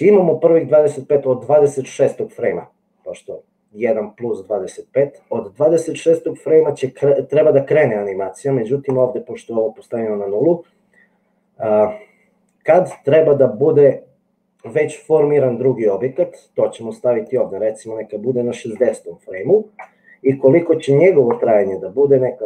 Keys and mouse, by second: 17.4-20.4 drag, 21.5-22.4 drag.